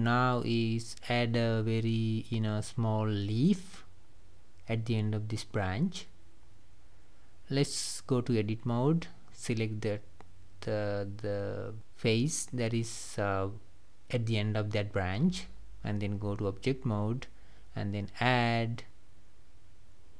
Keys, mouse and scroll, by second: 8.7 scroll up 2, 10.3 click, 13.8 shift+s, 14.2-15.7 scroll down 2, 17.1-19.4 drag, 19.4 s.